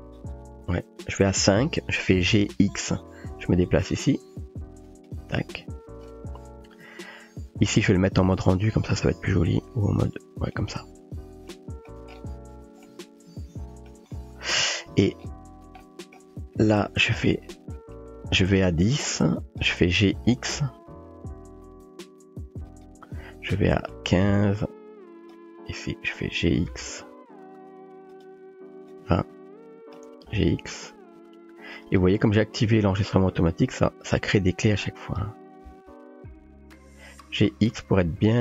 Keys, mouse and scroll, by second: 2.5 g, 9.5 click, 10.6 click, 11.5-11.9 shift+middle drag, 12.8-13.9 shift+middle drag, 16.0 shift+drag, 18.8-19.6 drag, 20.3 g, 23.9-25.3 drag, 26.7 g, 28.9-30.0 drag, 30.3 g, 34.3-35.2 drag, 35.7 g.